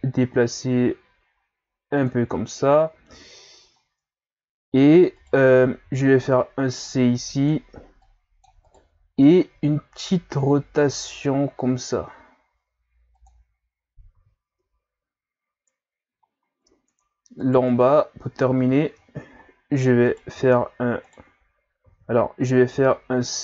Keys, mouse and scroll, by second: 2.4-3.8 ctrl+scroll up 4, 3.8 ctrl+scroll up 1, 5.2 right click, 5.8 c, 9.6 r, 14.2 z, 14.5 Tab, 16.3-16.8 scroll down 3, 16.8-17.4 scroll up 2, 17.4 right click, 17.7 Tab, 18.6 z, 19.0-19.9 scroll up 3, 20.0 right click, 20.3 v, 21.8 ctrl+z, 22.8 c.